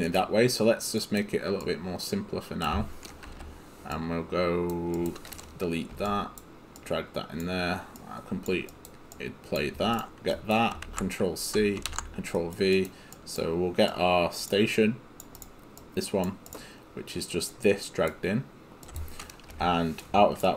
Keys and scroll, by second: 6.8 Delete, 10.9 ctrl+c, 11.9 ctrl+v.